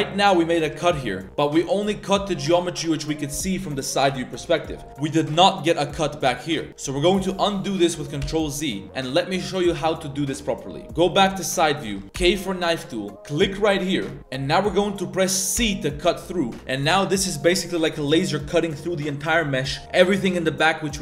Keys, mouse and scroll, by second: 0.0 middle click, 0.6 KP_Decimal, 1.2 middle click, 3.1 middle click, 4.6-4.9 middle drag, 6.5 middle click, 8.2 ctrl+z, 8.7 middle click, 10.7 KP_3, 11.2 KP_3, 12.2 k.